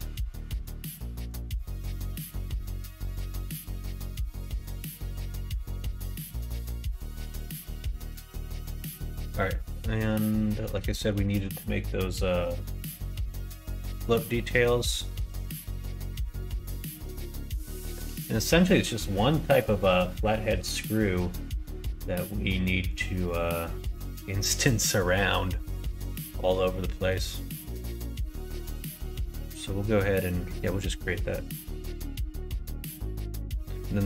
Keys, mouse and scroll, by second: 0.6 click, 2.3 middle click, 3.4 middle click, 4.1 click, 4.3 middle click, 4.6 Tab, 4.9 middle click, 5.8 Tab, 5.8 click, 7.1 middle click, 7.7 middle click, 8.2 middle click, 8.6 middle click, 9.5 middle click, 11.0 shift+middle click, 13.2 middle click, 14.3 middle click, 14.8 shift+middle click, 15.5 middle click, 16.6 middle click, 17.4 middle click, 17.7 shift+middle click, 25.3-27.0 middle drag, 27.5 middle click, 30.1 middle click, 30.7 middle click, 31.7 shift+a.